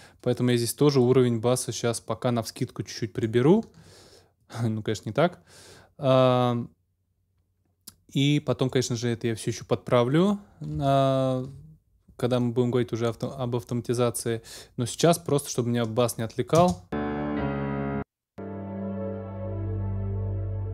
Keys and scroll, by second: 16.5 space.